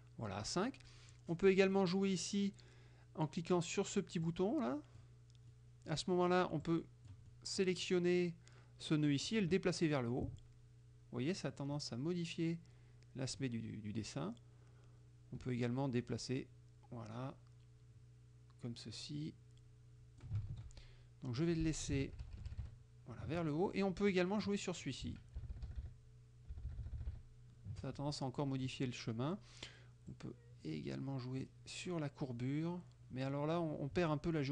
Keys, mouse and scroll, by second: 4.3 click, 5.5 middle click, 5.8 click, 6.7 click, 7.3 middle click, 9.3-20.5 drag, 20.5 ctrl+z, 21.5 click, 22.1 shift+Up, 24.2 click, 25.5 shift+Down, 26.6 shift+Down, 28.5 click, 30.2-31.7 drag, 33.4 click.